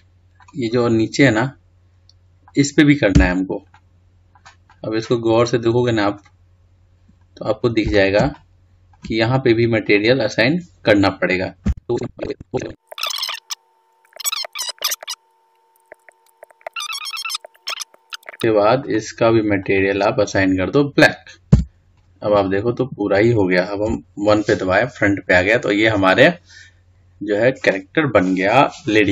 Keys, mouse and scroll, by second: 1.6-2.2 scroll up 3, 2.2-4.0 middle drag, 4.0 Tab, 4.6-7.3 middle drag, 7.3-8.6 scroll up 2, 8.6-10.9 middle drag, 10.9 click, 11.7 c, 12.1 Escape, 12.2 ctrl+z, 12.4 c, 13.0 shift+middle click, 13.2 c, 14.1 shift+middle click, 14.4 c, 14.8 right click, 14.8 ctrl+z, 15.0 c, 15.9 shift+middle click, 16.0-16.4 shift+scroll down 3, 16.1 middle click, 16.4 shift+middle click, 16.6 c, 17.4 shift+middle click, 17.7 c, 18.1 click, 18.2 ctrl+z, 19.6 click, 20.5-22.3 drag, 22.3 Tab, 22.8-24.7 scroll down 3, 24.7 KP_1, 27.2 scroll down 2, 27.8-28.5 scroll up 1.